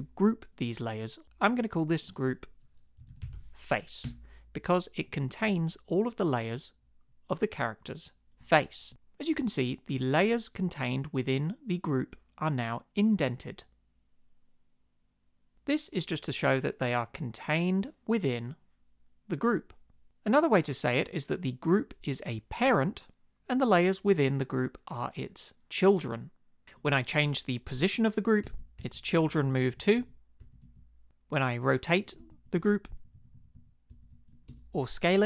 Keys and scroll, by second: 2.7-3.8 typing, 4.0 Return, 28.4 shift+Left, 29.0 shift+Left, 29.1 shift+Right, 29.6 shift+Right, 30.4 shift+Left, 32.3 shift+Up, 32.9 shift+Down, 33.9 shift+Up, 34.5 Return.